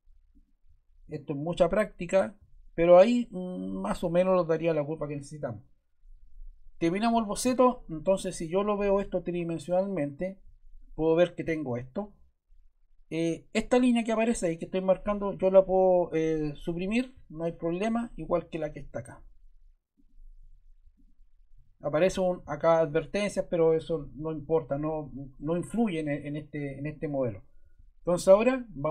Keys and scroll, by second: 15.3 BackSpace, 16.6 BackSpace, 20.3 BackSpace.